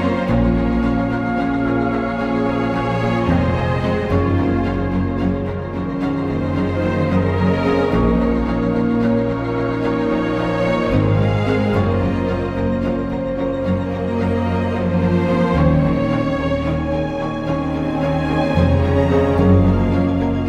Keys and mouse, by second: 0.4 click, 1.3 click, 3.0 click, 4.0 click, 4.7 click, 5.9 click, 6.8 click, 8.4 click, 10.6 Return, 11.9 click, 13.1 j, 15.2 shift+click, 16.1 j, 16.6 click, 18.1 j, 18.6 2, 18.9 click, 19.3 ctrl+x.